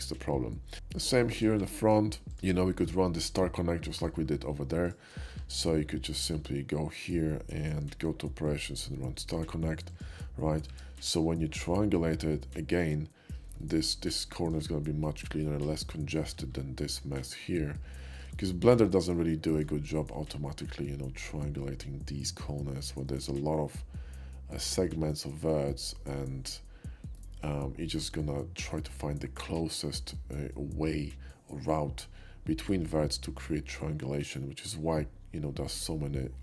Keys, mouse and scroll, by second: 0.7 shift+middle click, 1.3 shift+middle click, 1.6 Tab, 2.3 click, 2.6 ctrl+middle click, 4.0 ctrl+middle click, 4.8 shift+click, 5.3 q, 9.9 click, 10.7 Tab, 11.0 q, 13.6 shift+middle click, 14.4 shift+middle drag, 15.7 shift+middle click, 17.8-18.2 shift+middle drag, 18.4 shift+middle click, 19.2-19.7 shift+middle drag, 20.2 shift+middle click, 27.2 middle click, 34.1 middle click, 35.7 click.